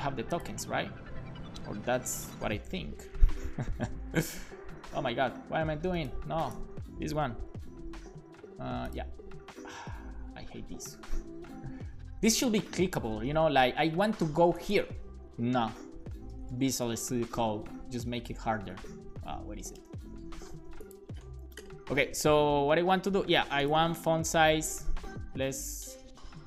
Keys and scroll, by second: 7.3 ctrl+Tab, 9.8 ctrl+Tab, 15.7 ctrl+Tab, 18.5 ctrl+Tab.